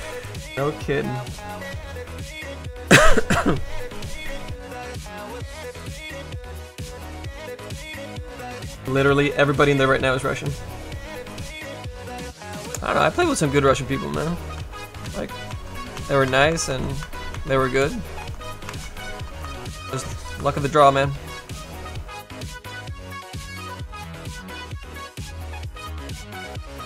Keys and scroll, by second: 13.5-16.3 typing, 16.8 ctrl+z, 17.1 ctrl+z, 17.3 ctrl+z, 17.7 ctrl+z, 18.8 z.